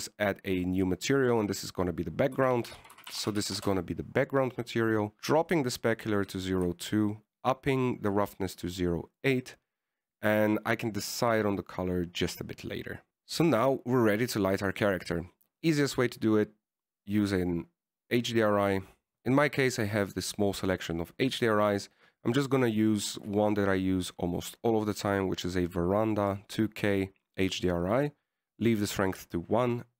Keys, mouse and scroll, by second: 1.5 click, 1.5 middle click, 2.3 click, 2.4 click, 6.3 click, 7.9 click, 14.0 click, 17.5 click.